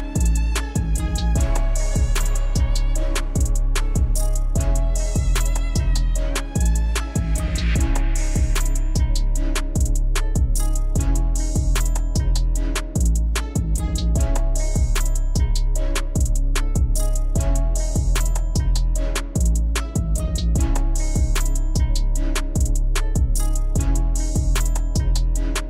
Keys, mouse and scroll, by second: 5.0-9.4 drag, 11.7 click, 11.8-13.9 drag, 17.2 click, 23.4 click.